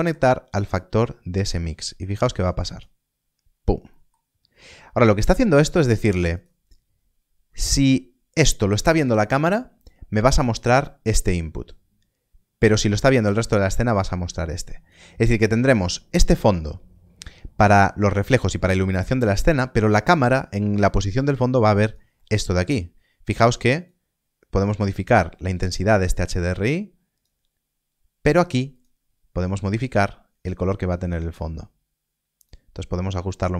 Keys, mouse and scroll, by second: 0.7 click, 3.9 middle click, 4.7 scroll down 1, 5.3 middle click, 6.3 click, 10.3 click, 22.1 middle click, 22.5 scroll up 1, 23.8 click.